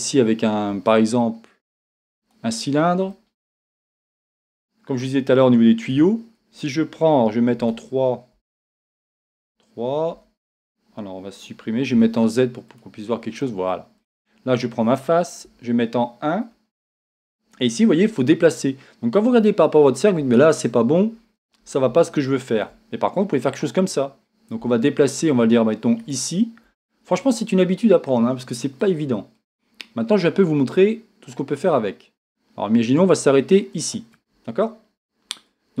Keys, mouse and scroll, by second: 2.4 shift+a, 3.1-4.4 middle drag, 4.4-5.7 scroll down 1, 6.0 Tab, 10.1 a, 12.8 z, 13.4 middle click, 15.5 KP_1, 16.5 scroll down 1, 22.0-26.0 shift+middle drag, 26.0-28.9 shift+right drag, 28.9-33.9 drag.